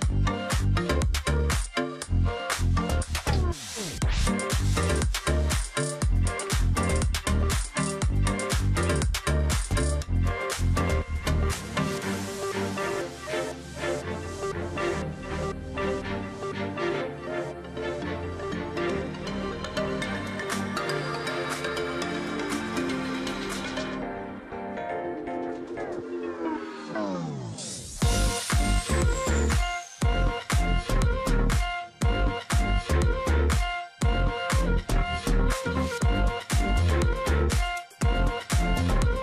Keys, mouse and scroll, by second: 0.1 ctrl+click, 1.3 double click, 3.5-4.1 alt+scroll down 1, 5.5 ctrl+click, 6.6-7.4 alt+scroll up 1, 7.4 ctrl+click, 8.7 ctrl+click, 9.9 ctrl+click, 11.0 ctrl+click, 11.9 ctrl+click, 13.1 alt+scroll down 1, 13.5 ctrl+click, 13.6 space, 14.0 alt+scroll down 1, 14.1 space, 14.8 alt+scroll up 1, 15.6 ctrl+click, 16.2 ctrl+click, 17.0 alt+scroll down 1, 17.8 alt+scroll up 1, 18.5 ctrl+click, 19.1 ctrl+click, 20.3 ctrl+click, 20.8 alt+scroll down 1, 21.2 ctrl+click, 21.4 alt+scroll down 1, 21.5 space, 21.8 alt+scroll up 1, 22.6 alt+scroll down 1, 22.7 space, 23.1-23.6 alt+scroll up 1, 24.4-24.7 alt+scroll up 1, 25.0 ctrl+click, 26.1 double click, 27.8 ctrl+click, 28.0 alt+scroll up 1, 28.3 space, 29.0 space, 30.8 space, 32.0 space, 33.0 ctrl+z, 35.2 ctrl+click, 35.6 alt+scroll down 1, 35.8 space, 36.0-36.4 alt+scroll up 1, 36.4 ctrl+click, 37.4-37.9 alt+scroll down 1, 38.1 space, 38.7 ctrl+click, 39.1 alt+scroll up 1.